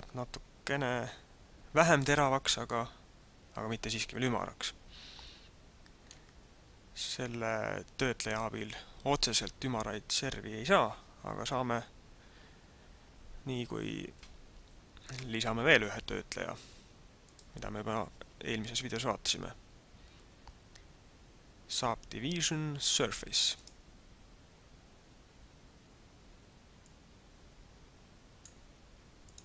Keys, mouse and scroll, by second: 2.2 middle click, 17.2 click, 26.9 click, 29.3 click.